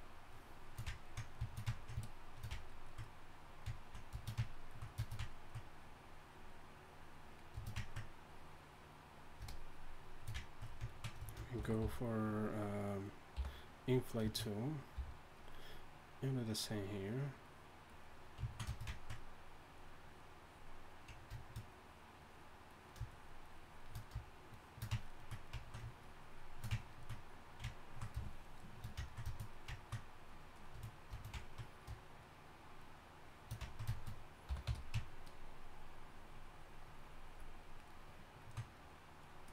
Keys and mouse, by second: 5.8-10.4 drag, 10.5-11.5 drag, 11.5 shift+c, 11.8 f, 13.3 i, 15.1 f, 16.8-21.0 drag, 26.7-29.1 drag, 30.7-35.0 drag, 34.5 y, 34.7 f, 35.3-39.5 drag.